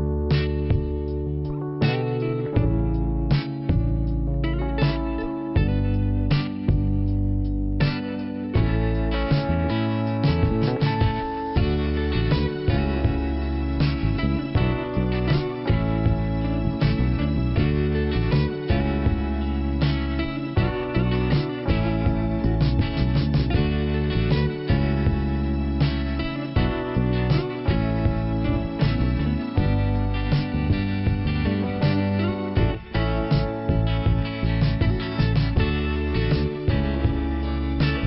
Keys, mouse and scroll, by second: 0.3 click, 1.6 click, 3.6 middle click, 5.4-5.7 scroll down 2, 7.1 scroll up 2, 9.2 scroll down 2, 10.0 middle click, 11.6 scroll up 1, 13.5 click, 14.5 click, 18.1 click, 23.3 click, 24.3 click, 25.7 click, 27.4 click, 28.0 scroll down 2, 29.6 scroll up 2, 31.6 click, 37.1 scroll down 2, 37.7 middle click.